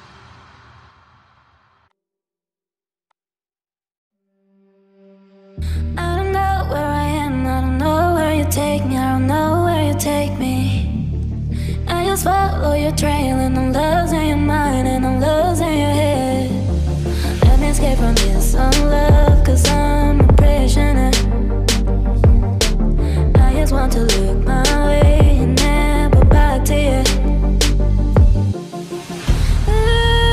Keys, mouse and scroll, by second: 18.8-20.2 typing, 28.1 right click.